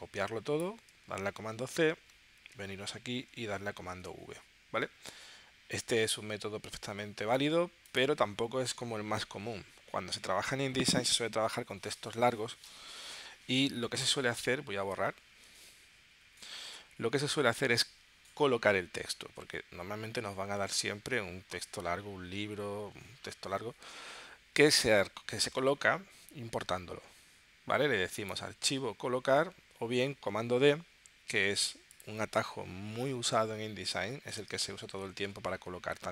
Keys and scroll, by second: 14.0 BackSpace, 15.3 super+Tab.